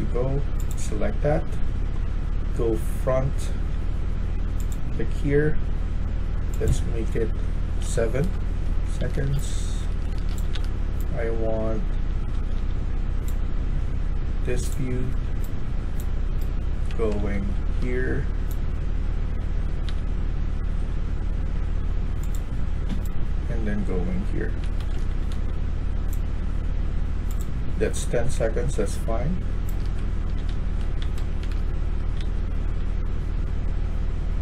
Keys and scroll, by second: 0.9 typing, 2.1-3.6 w, 7.7-10.4 typing, 8.1 Return, 11.7-12.4 typing, 14.9-17.7 typing, 19.1-20.7 typing, 22.8-25.7 typing, 28.7-32.1 typing.